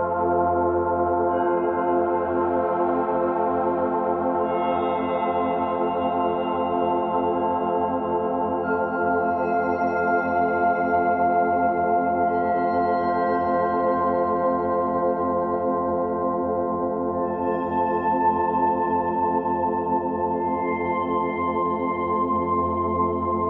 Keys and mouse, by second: 0.9 z, 2.1 ctrl+z, 2.5 alt+click, 4.5-5.2 typing, 4.7-9.3 drag, 9.3 ctrl+z, 10.5 f, 10.9-18.1 drag, 15.9 typing, 18.1 typing, 18.9-23.4 drag.